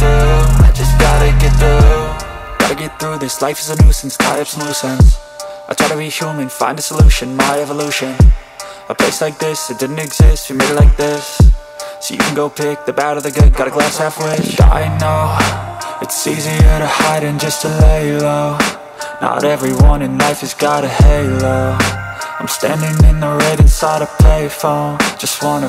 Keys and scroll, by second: 1.4 space.